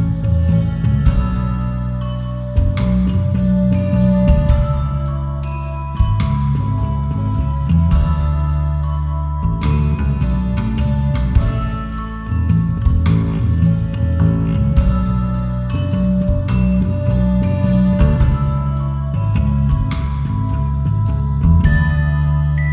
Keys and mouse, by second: 1.5 KP_1, 2.0 click, 2.6 e, 3.7 click, 4.0 r, 5.6 click, 5.9 s, 7.0 click, 7.3 g, 8.4 click, 9.0 click, 10.0 s, 10.9 click, 11.1 g, 12.3 click, 13.3 click, 14.1 s, 15.0 click, 15.3 g, 15.8 click, 16.2 r, 16.7 click, 17.6 drag, 18.1 g, 19.6 e, 20.7 click, 21.4 a, 22.4 s.